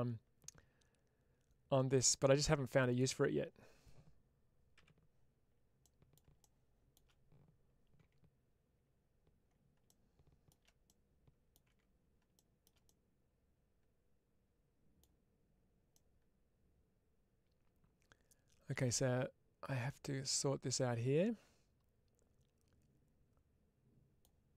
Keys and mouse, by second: 2.8 click, 4.6 n, 5.7 middle click, 8.2 Tab, 10.7-11.4 middle drag, 12.7-14.8 middle drag, 15.8-24.1 middle drag.